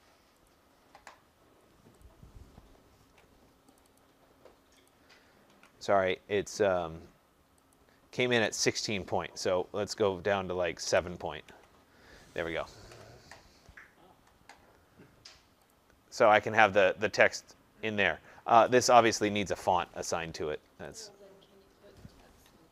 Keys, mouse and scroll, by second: 0.4 click, 3.0 ctrl+a, 3.7 click, 3.9 click, 5.3 click, 5.5 ctrl+a, 7.7 click, 8.4 click, 10.8-11.4 typing, 15.7 click, 16.3 click, 18.6 click, 18.8 click, 19.9 ctrl+a, 20.9 click.